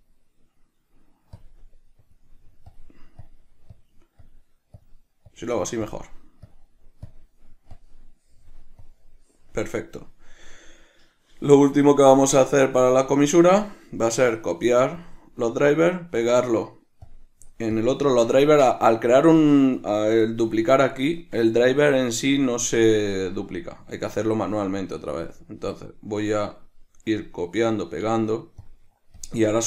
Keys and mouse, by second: 3.5-4.5 drag, 5.0-6.2 drag, 6.7-12.8 drag, 13.4-14.5 drag, 14.5-18.0 right drag, 18.0 click, 20.8-26.8 drag, 22.2 Escape, 26.8-29.4 right drag, 29.4 drag.